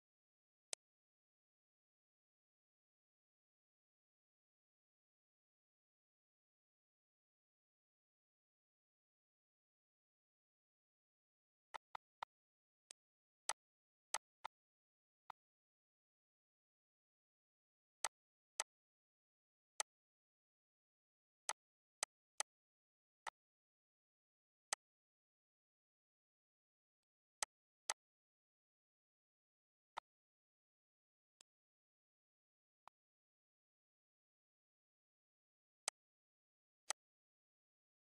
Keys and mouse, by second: 0.0 click, 0.5 click, 1.4 click, 3.3 click, 3.8 click, 4.7 click, 6.1 click, 7.6 click, 8.8 click, 10.7 click, 13.2 click, 14.4 click, 15.5 click, 18.2 click, 19.1 click, 20.2 click, 24.2 click, 25.1 click, 25.6 click, 26.1 click, 27.3 click, 28.3 click, 28.9 click, 29.6 click, 31.1 click, 31.8 click, 32.3 click, 33.6 click, 34.1 click, 35.0 click, 36.6 click, 37.6 click.